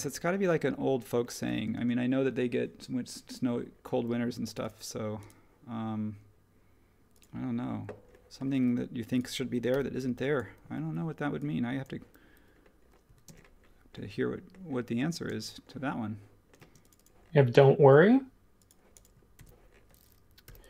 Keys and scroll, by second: 1.7 space, 9.7 p, 13.0 e, 15.2 space, 16.6 space, 19.3 super+1, 20.4 h.